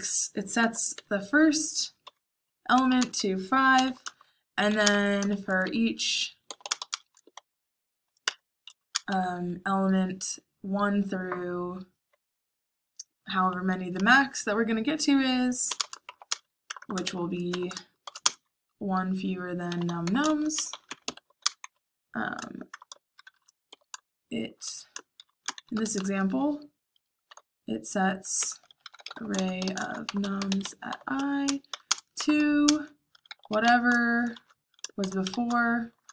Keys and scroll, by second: 0.0-9.1 typing, 10.3 ;, 13.9 space, 15.6-23.6 typing, 24.8-30.3 typing, 28.3 Tab, 34.9-36.1 typing.